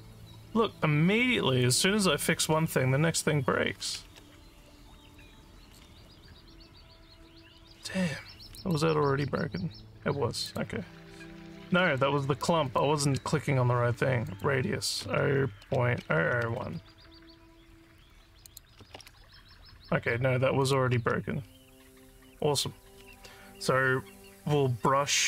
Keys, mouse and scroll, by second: 1.6 click, 8.5 click, 10.4 click, 11.9 click, 12.7 click, 14.3 click, 18.4 click, 20.6 click.